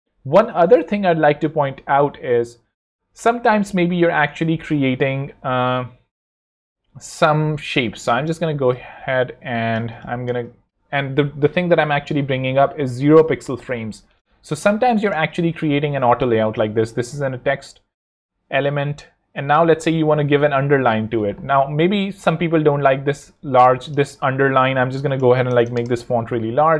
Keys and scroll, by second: 6.4 a, 9.9 space, 14.4-20.1 typing, 20.6 super+u, 24.8 super+Escape, 25.5 0, 25.7 Return.